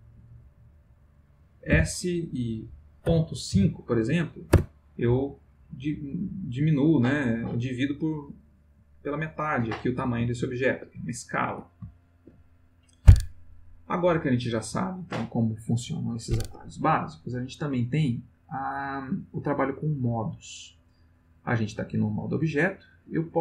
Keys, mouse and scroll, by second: 1.7 s, 3.0 ., 3.5 5, 4.5 Return, 10.3-11.0 ctrl+middle drag, 11.1-11.7 ctrl+shift+middle drag, 12.0 ctrl+shift+middle click.